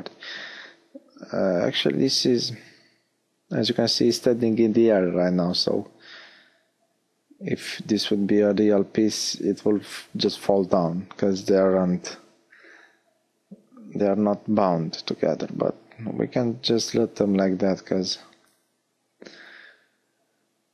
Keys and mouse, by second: 11.5-15.1 middle drag.